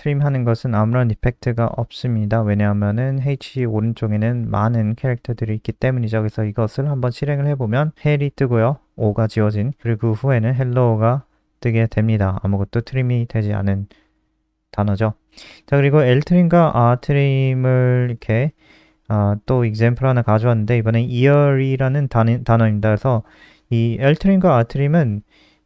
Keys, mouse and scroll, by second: 6.7 ctrl+s, 6.8 click, 7.0 F5, 9.2 click, 10.8 click, 11.0-13.0 scroll down 3, 13.0 click, 13.8 ctrl+c, 14.0 click, 15.8 ctrl+v, 23.1 click.